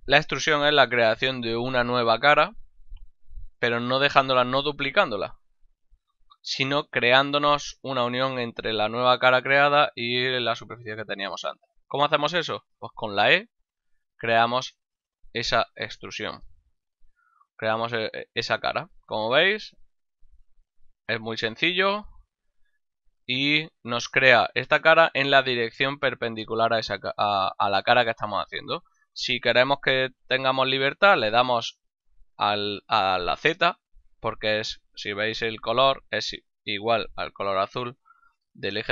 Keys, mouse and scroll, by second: 4.7 shift+d, 5.5 right click, 5.9 ctrl+z, 13.1 e, 15.8 click, 16.6 middle click, 22.1 e.